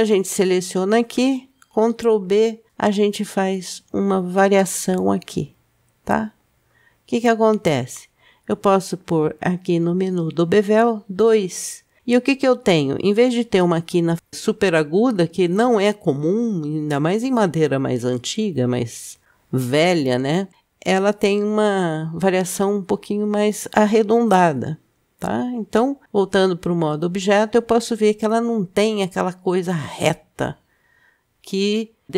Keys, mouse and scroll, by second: 0.8 click, 2.5 ctrl+b, 10.2 click, 12.4-13.0 scroll up 2, 26.8 Tab.